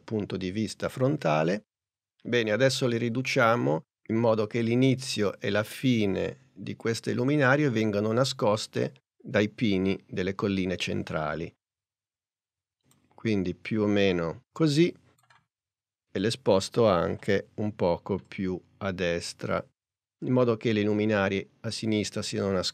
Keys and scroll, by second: 3.2 s, 17.2 p.